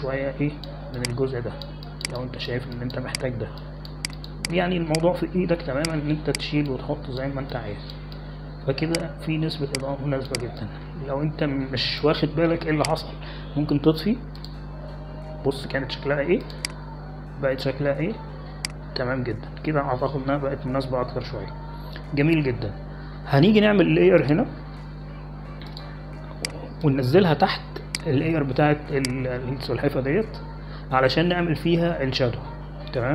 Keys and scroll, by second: 7.7 x.